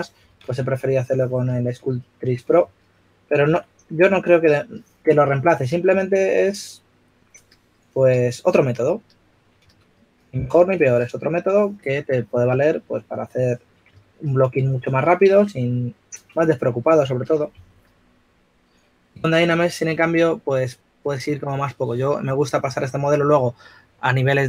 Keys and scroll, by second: 0.7-1.5 typing, 3.0-4.5 typing, 10.2-11.3 typing, 14.8 typing, 18.8 4.